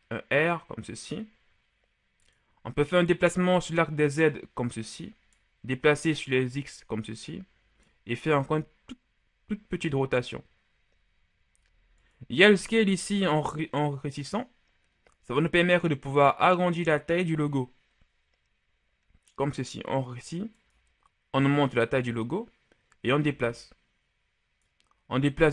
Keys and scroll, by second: 8.4 r, 13.0 s.